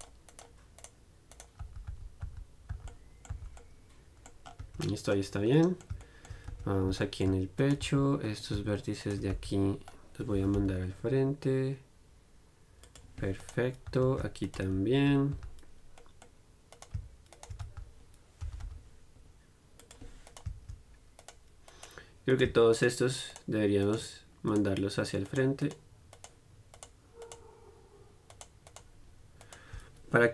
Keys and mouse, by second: 1.1-3.1 right drag, 1.9-3.5 typing, 4.2-6.7 middle drag, 4.9 Tab, 6.7 Tab, 7.2 click, 8.1 right click, 8.1 z, 8.6-10.3 drag, 9.6 z, 10.6 g, 13.7 right click, 14.1 z, 15.2-20.0 right drag, 15.2 z, 15.6 z, 17.9 z, 18.0 middle click, 18.7 g, 21.3-30.3 right drag.